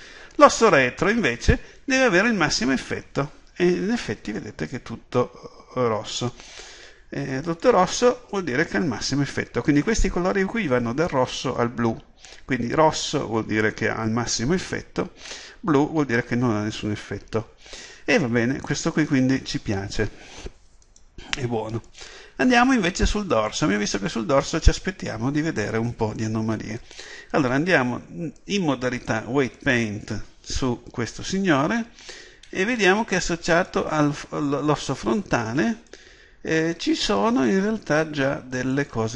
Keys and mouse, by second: 0.7-23.4 drag, 23.4 right click, 28.4-38.7 drag.